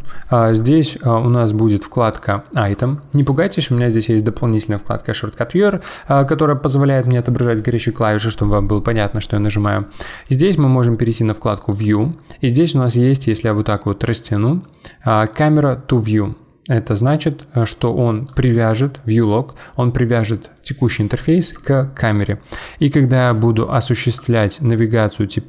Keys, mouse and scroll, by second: 1.6 click, 11.7 click, 14.6-19.8 drag, 22.3-25.4 middle drag.